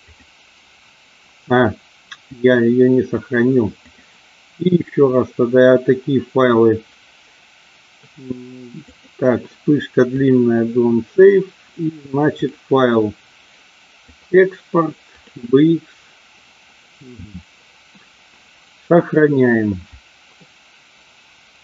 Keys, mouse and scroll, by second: 3.8-10.3 drag, 12.3-15.5 drag.